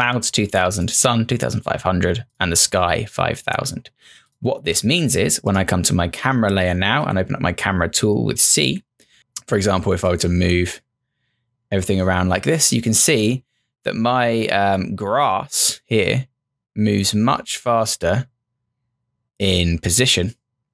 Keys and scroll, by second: 7.0 c.